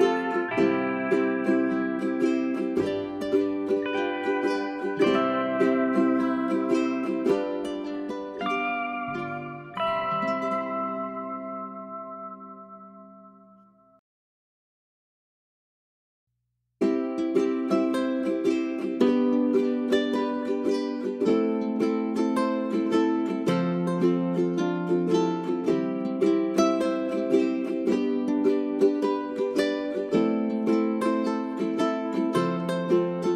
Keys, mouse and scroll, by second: 0.5 scroll up 1, 1.0-6.6 drag, 9.1 space, 9.4-13.6 drag, 13.6 space, 14.6 click, 14.9 right click, 15.3 1, 15.8-27.1 drag, 27.1 right click, 28.3-33.3 drag.